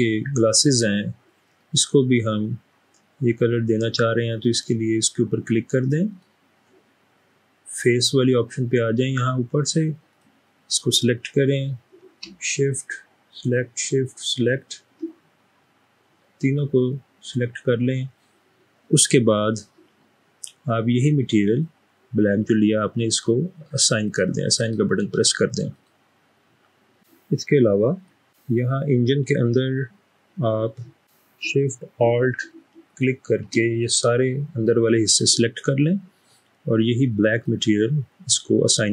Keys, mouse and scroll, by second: 0.0-1.7 middle drag, 4.6 click, 6.1 click, 13.4 shift+click, 14.4 shift+click, 17.0 middle click.